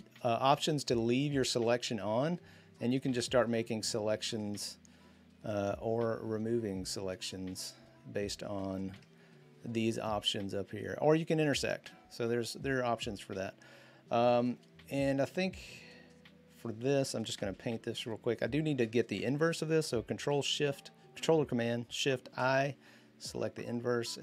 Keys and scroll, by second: 17.3 b, 21.9 ctrl+shift+i, 23.4 typing.